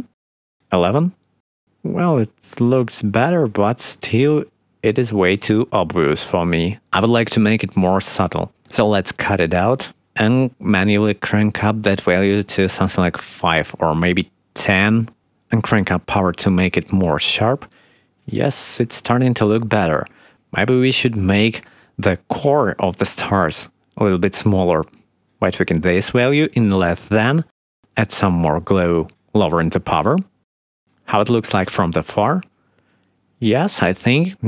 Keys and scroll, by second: 1.6 1, 12.0 5, 14.2 1, 14.6 0, 14.7 Return, 17.0 3, 18.7 7, 25.3 ., 25.3 0, 25.5 5, 25.8 Return, 27.5 ., 27.5 0, 28.4 3, 28.9 Return, 31.3 6, 31.9 7.